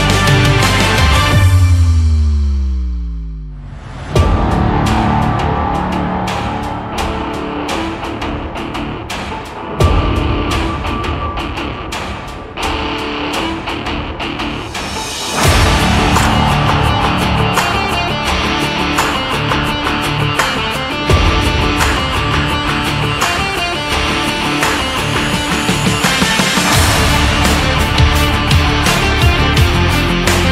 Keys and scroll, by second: 7.6 ctrl+s, 14.4 ctrl+-, 24.7 ctrl+=.